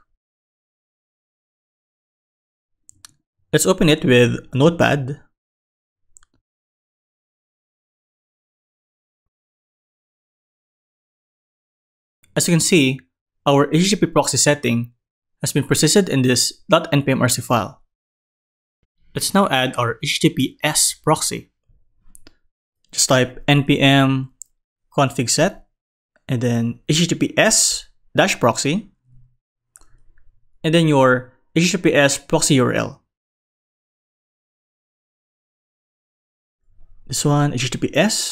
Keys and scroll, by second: 10.8 super+Right.